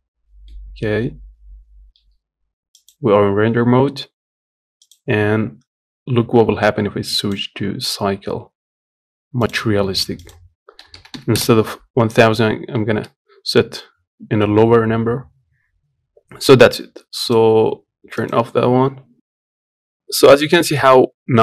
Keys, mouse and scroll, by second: 0.2-2.6 middle drag, 2.6 z, 7.2-9.3 drag, 10.6-12.8 drag, 12.8-14.8 scroll up 2, 17.5-19.0 drag, 19.0 middle click.